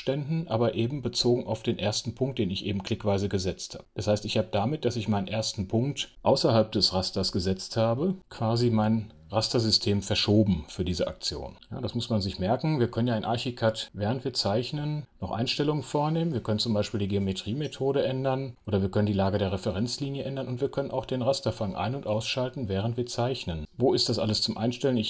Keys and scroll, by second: 6.1 F7.